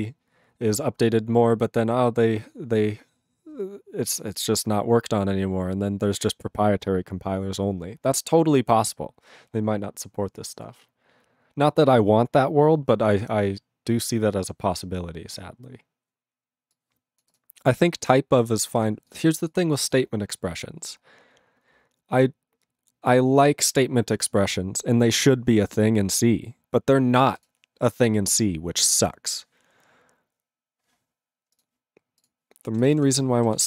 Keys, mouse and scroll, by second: 32.3 ctrl+s, 32.8 ctrl+a, 32.8 ctrl+space, 32.9 ctrl+e, 32.9 ctrl+g, 33.5 ctrl+s.